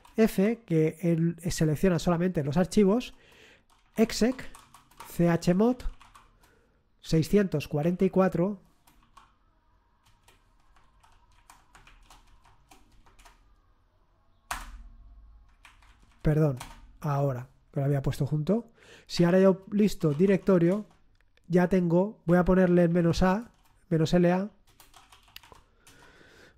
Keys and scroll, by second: 0.0-0.7 typing, 3.1-9.0 typing, 10.0-12.3 typing, 14.5 Return, 15.6 Up, 15.8 Left, 16.3 Left, 16.5 space, 16.8 Return, 18.9-20.6 typing, 20.7 Return, 22.3 Up, 22.6 Home, 23.0 Right, 23.3 Right, 23.4-25.9 typing.